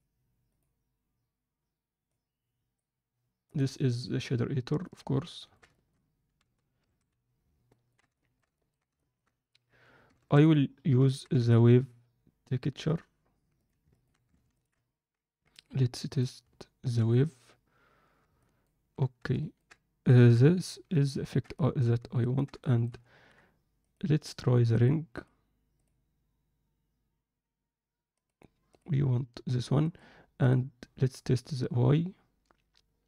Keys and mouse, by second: 2.2-5.1 drag, 5.8 alt+shift+middle click, 7.7 ctrl+alt+middle click, 8.2 alt+shift+middle click, 8.6 ctrl+alt+middle click, 9.0 alt+shift+middle click, 13.9 ctrl+alt+click, 16.4 click, 18.4 ctrl+alt+click, 19.3 ctrl+alt+click, 21.1 ctrl+alt+click, 21.6 alt+shift+click, 22.2 ctrl+alt+click, 22.6 alt+shift+middle click, 23.9-24.7 drag, 25.3 click, 28.2-28.8 drag, 29.9-30.6 drag.